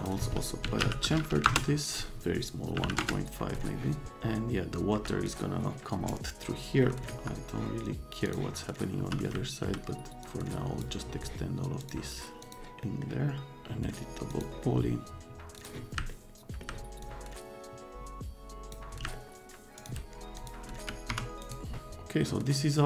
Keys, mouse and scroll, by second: 0.4-1.3 typing, 1.4 Return, 2.7 KP_Decimal, 2.8 KP_5, 3.0 KP_Enter, 4.1 right click, 4.5 scroll up 2, 4.5 middle click, 7.1 middle click, 7.2 F3, 9.0 F3, 9.3 right click, 10.2 middle click, 11.8 click, 12.4 click, 12.8 right click, 14.3 click, 15.6 click, 16.1 click, 17.0-18.7 drag, 19.1 click, 19.8 click, 20.3 click, 20.7 x, 21.1 F3, 21.4 right click.